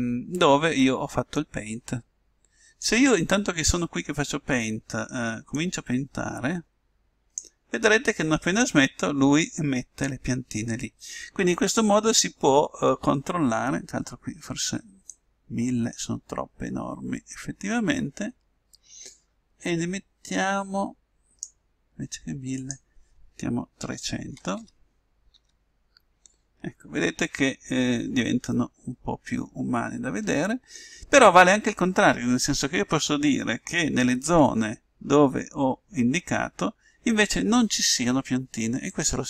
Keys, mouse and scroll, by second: 5.8-7.5 drag, 15.4-17.1 drag, 22.7-24.5 drag, 24.7 0.